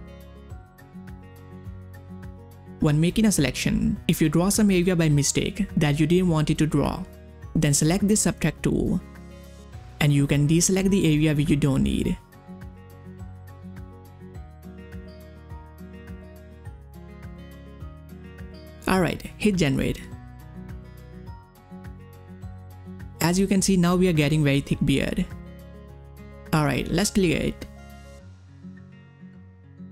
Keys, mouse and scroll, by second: 4.7-6.6 drag, 8.6-12.9 drag, 13.3 click, 15.0 click, 18.6 click, 22.6 click, 26.6 click, 29.1 ctrl+scroll down 1, 29.4-29.9 typing, 29.4 click, 29.8 ctrl+scroll up 1.